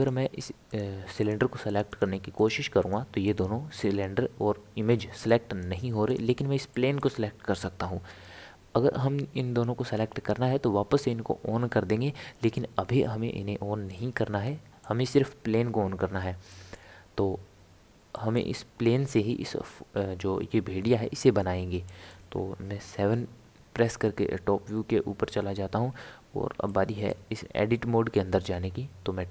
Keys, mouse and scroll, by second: 0.7 click, 1.2 click, 1.7 click, 1.9 click, 2.4 click, 2.8 click, 3.2 click, 5.0 click, 5.3 click, 6.1 click, 6.7-9.7 middle drag, 13.9-21.1 middle drag, 21.9-23.0 middle drag, 23.0 KP_7, 24.3-24.8 scroll up 1, 24.8-25.4 scroll down 1, 25.4 scroll up 1, 26.7-28.5 shift+middle drag, 28.5 Tab.